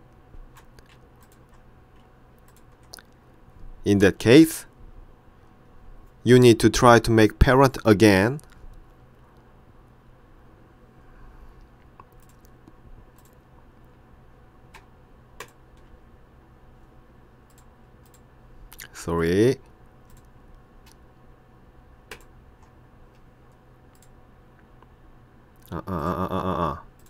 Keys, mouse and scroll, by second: 1.3 ctrl+click, 2.6 ctrl+click, 12.3 click, 13.2 click, 15.5 shift+click, 17.6 click, 19.2 click, 20.2 click, 22.2 shift+click, 24.0 click.